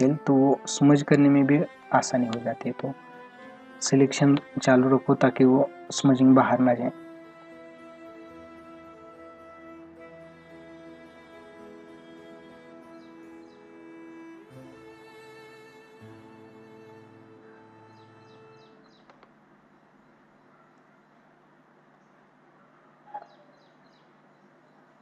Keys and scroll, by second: 1.8 space, 19.1 ctrl+alt+z.